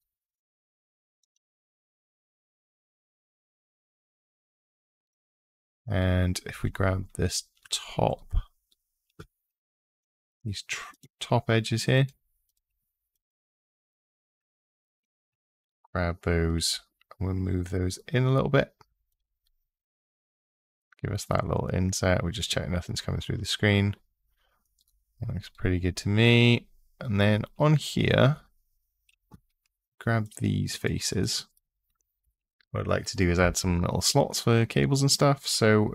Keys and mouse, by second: 1.0 click, 7.9 click, 9.3 3, 9.8 2, 11.7 shift+click, 13.7 shift+click, 15.1 g, 16.4 x, 18.8 click, 29.4 3, 30.6 shift+click, 30.9 shift+click, 31.3 shift+click.